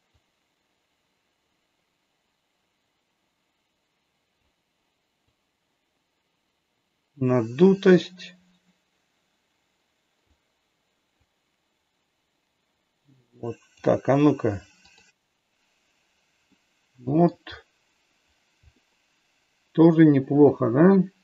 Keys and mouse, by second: 0.3-4.3 drag, 5.4-10.2 drag, 11.3-13.7 drag, 14.8 click, 16.5 middle click, 18.8-21.2 middle drag.